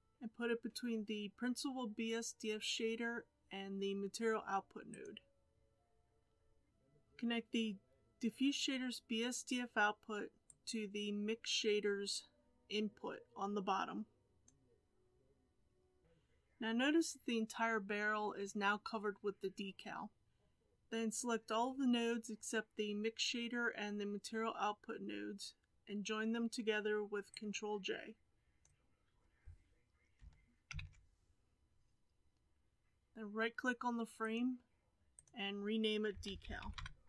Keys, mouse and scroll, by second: 16.0-30.7 middle drag, 30.7 ctrl+j.